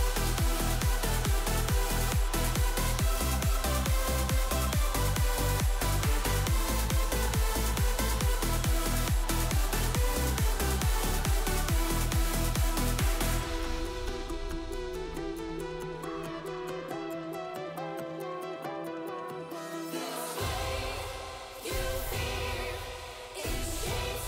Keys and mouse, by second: 0.7 middle click, 1.6 middle click, 2.0 shift+middle click, 2.4 middle click, 3.1 e, 7.1 a, 7.5 shift+n, 7.9 m, 10.3 middle click, 10.6 Tab, 11.2 shift+middle click, 11.6 middle drag, 11.8 Tab, 12.1 middle click, 12.7 ctrl+r, 13.7 ctrl+b, 15.9 middle click, 16.7 ctrl+r, 18.3 ctrl+r, 20.7 middle click, 21.5 ctrl+r, 23.1 middle click.